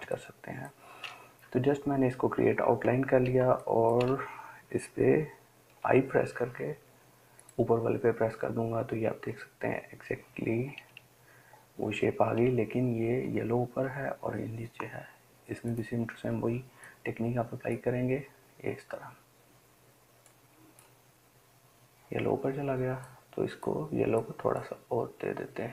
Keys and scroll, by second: 6.1 i.